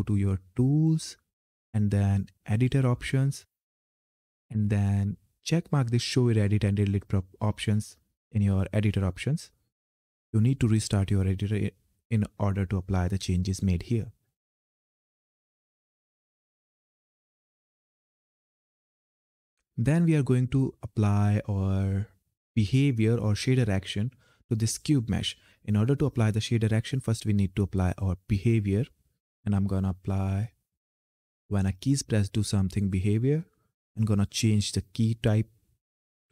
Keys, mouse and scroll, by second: 0.3 click, 14.0-17.2 drag, 17.3 click, 19.0-20.8 scroll down 1, 27.6 click, 31.6 click, 36.0 f.